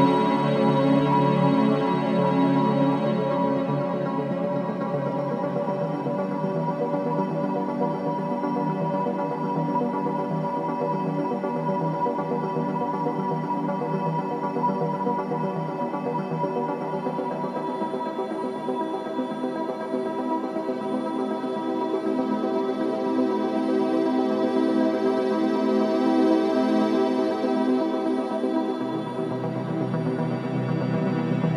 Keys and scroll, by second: 0.4 F9, 3.0 2, 4.3 ctrl+d, 4.4 Escape, 5.6 Escape, 7.1 ], 9.6 Escape, 13.5 ], 18.9 ], 29.4 ], 29.8 4, 30.8 3, 31.1 ].